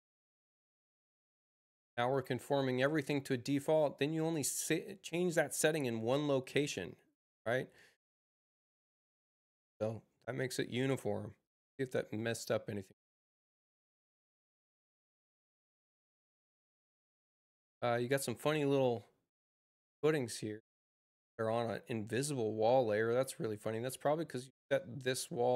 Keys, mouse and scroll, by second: 1.9 click, 18.1 click.